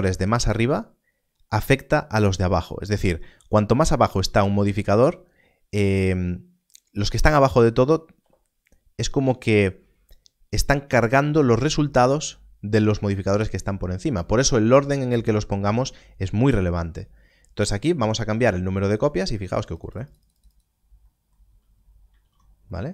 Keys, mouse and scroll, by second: 0.7-3.0 scroll down 1, 18.3-20.0 scroll down 1, 21.4-22.0 scroll down 1, 22.1 alt+a.